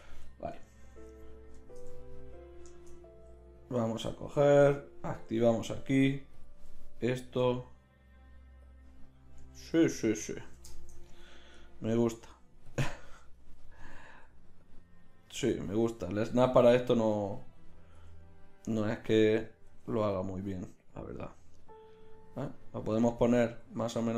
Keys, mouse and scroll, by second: 1.1 z, 5.2-7.9 middle drag, 7.4 g, 9.7 ctrl+z, 14.2 g, 15.4 ctrl+z, 16.8-18.0 drag, 18.0 g, 19.6 g, 23.6 g.